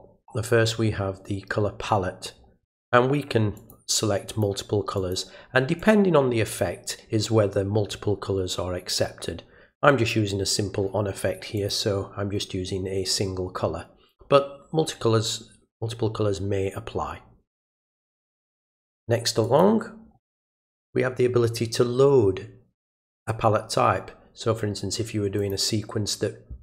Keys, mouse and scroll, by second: 3.6 click, 4.3 click, 5.0 click, 5.8 click, 6.5 click, 11.6 click, 19.4 click, 25.4 click.